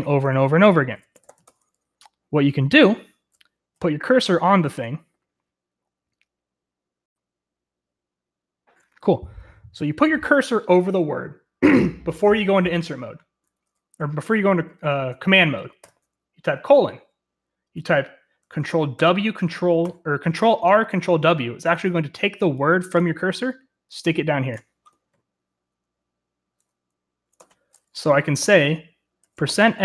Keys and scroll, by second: 0.8-1.8 typing, 3.8 l, 19.4 ctrl+r, 19.4 typing, 19.8 ctrl+w, 27.3 Escape, 28.4-29.8 typing.